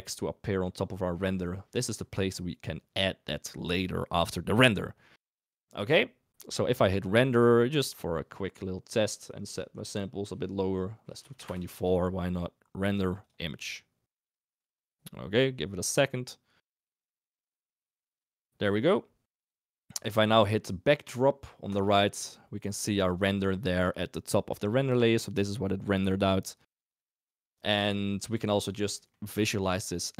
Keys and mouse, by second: 7.4-8.3 drag, 9.0 click, 9.8-11.5 drag, 12.9-13.6 drag, 21.7 click, 22.6 click, 27.9 middle click, 29.0 middle click.